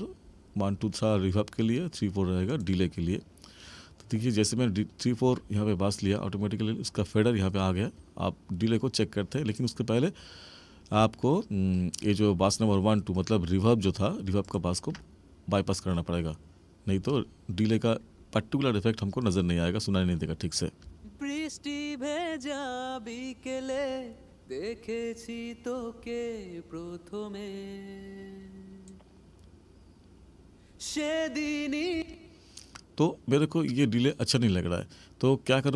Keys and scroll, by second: 20.8 space, 31.9 space.